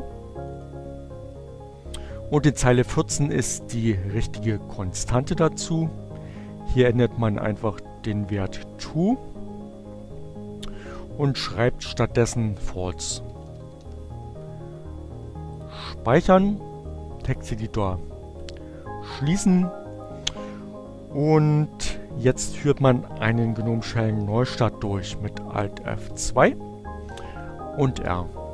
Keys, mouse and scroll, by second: 2.9 click, 5.1-7.2 drag, 9.8 f, 12.6-13.5 typing, 14.9 click, 17.5 click, 25.2 alt+F2, 26.2 r.